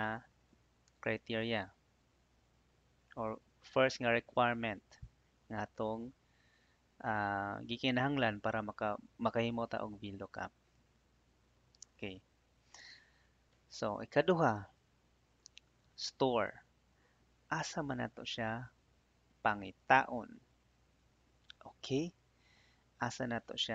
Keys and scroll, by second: 14.2 Tab.